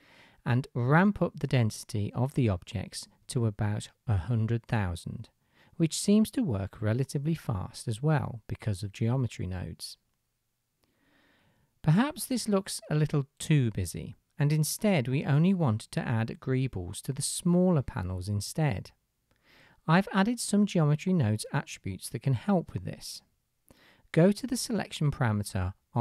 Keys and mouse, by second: 0.3 KP_0, 6.0 KP_0.